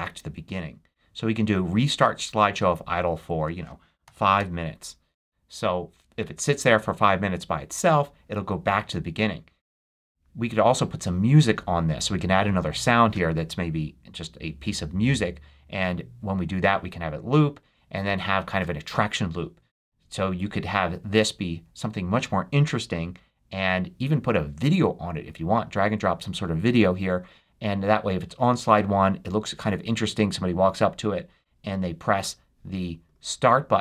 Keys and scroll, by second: 3.9 5, 4.2 Return.